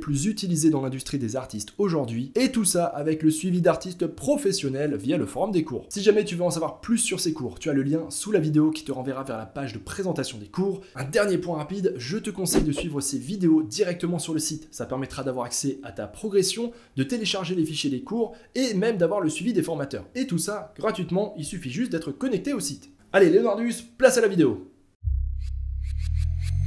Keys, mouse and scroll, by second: 0.0-0.3 typing.